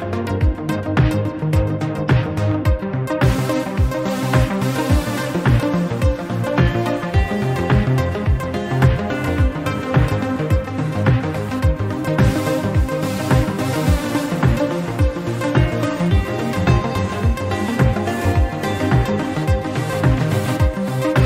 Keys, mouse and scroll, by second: 0.6 Tab, 0.7 click, 0.9 scroll down 5, 1.1-1.7 middle drag, 1.7-2.1 scroll up 7, 2.1-2.7 scroll down 12, 2.7 middle drag, 3.4 middle click, 3.5-4.0 scroll down 2, 4.0 click, 4.5 KP_1, 4.9 scroll up 2, 5.2 shift+middle click, 5.9-6.3 shift+middle drag, 6.3 click, 6.6 click, 8.1 click, 8.5-9.3 drag, 9.3-9.9 scroll down 5, 10.0 shift+middle click, 11.1 click, 12.1-12.6 scroll up 2, 12.6 click, 13.6-14.9 scroll up 15, 13.8 shift+middle click, 14.5 shift+middle click, 14.9-15.3 shift+middle drag, 15.5 shift+middle click, 16.3 click, 17.1-19.4 drag, 19.4-20.9 scroll up 3, 19.7 shift+middle click, 20.9-21.2 drag.